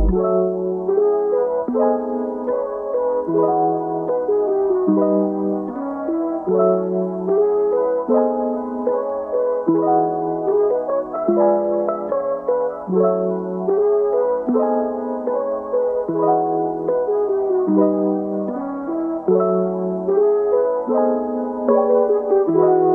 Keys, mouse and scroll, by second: 1.4 scroll up 2, 1.7-2.5 middle drag, 2.5 click, 2.9 scroll up 1, 2.9-3.6 middle drag, 3.6 Tab, 5.4 alt+s, 6.4 g, 7.9 click, 8.3 g, 9.3 Tab, 9.5-13.4 middle drag, 13.4 scroll up 1, 13.5-13.9 middle drag, 13.9 scroll up 1, 14.1 scroll down 2, 14.3-17.3 middle drag, 18.0 scroll down 1, 18.2-18.6 middle drag, 18.6 scroll down 2, 18.9-19.3 middle drag, 19.3 scroll up 2, 19.5-20.2 middle drag, 20.2 click, 20.8-21.6 middle drag, 21.6-22.9 scroll up 1.